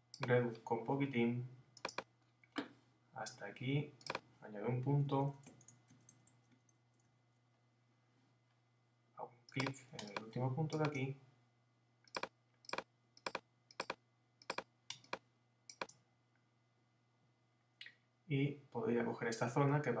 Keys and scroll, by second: 5.1 Down, 5.3 Left, 5.8 Down, 6.5 Left, 7.2 Down.